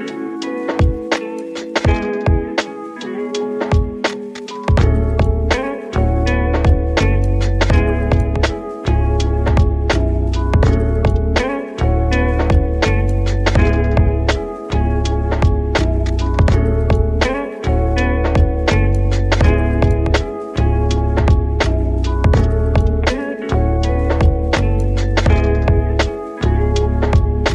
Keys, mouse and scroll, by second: 2.0-3.6 shift+middle drag, 3.6 a, 4.3 s, 7.5 middle click, 8.2 ctrl+r, 9.8 middle click, 10.6 g, 12.3-13.4 middle drag, 13.4 ctrl+b, 17.5 Tab, 17.8-21.0 middle drag, 21.0 click, 24.2-24.9 drag, 25.5-27.5 drag.